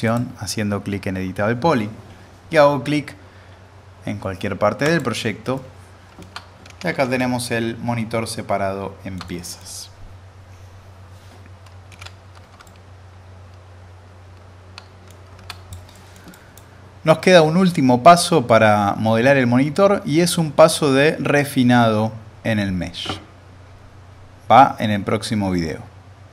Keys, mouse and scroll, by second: 0.0 click, 4.8 click, 5.8-6.5 alt+middle drag, 6.7 ctrl+s, 7.2-9.9 alt+middle drag, 11.9 ctrl+s, 12.6-15.1 alt+middle drag, 15.4 alt+z, 15.5 click, 15.9 middle click, 16.3 click.